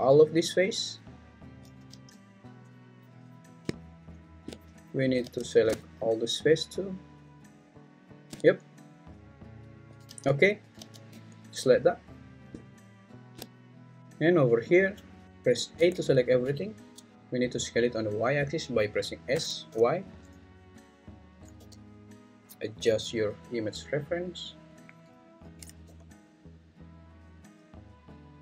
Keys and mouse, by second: 6.0-8.0 alt+shift+drag, 11.1 alt+`, 15.8 a, 17.1 Escape, 17.1 s, 17.1 z, 19.3 s, 19.7 y, 21.3 click, 21.6 g, 22.7 y, 24.9 click, 25.5 s, 25.8 y.